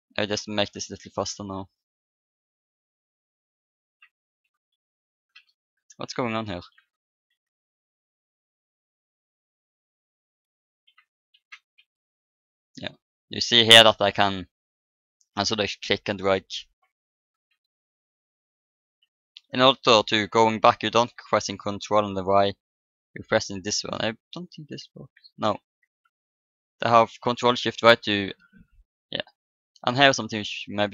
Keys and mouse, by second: 6.1 ctrl+z, 7.2 r, 14.8-16.9 drag, 17.5 ctrl+z, 18.7 ctrl+shift+z, 22.0 ctrl+y, 23.2 ctrl+shift+z, 24.7 ctrl+y, 25.7 ctrl+shift+z.